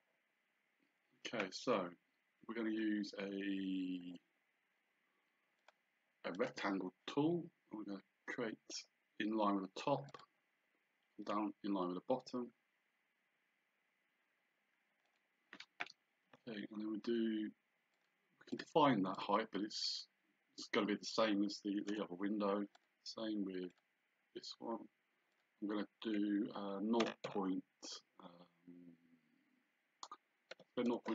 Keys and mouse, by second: 5.6 click, 10.1 click, 15.1 click, 18.0 click, 21.9 Return, 22.8 click, 25.4 click, 27.1 KP_0, 30.6 KP_8, 31.0 Return.